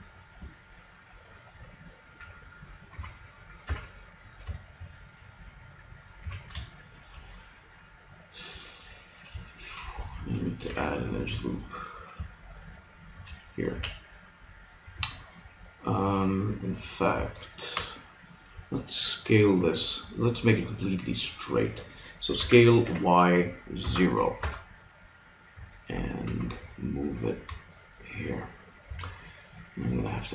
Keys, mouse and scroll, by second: 0.3-2.9 drag, 2.9 KP_3, 3.7 KP_Decimal, 6.2 a, 10.7 ctrl+r, 13.7 a, 17.3-19.2 drag, 22.4 s, 26.3 g, 28.1-29.8 drag, 28.9 a.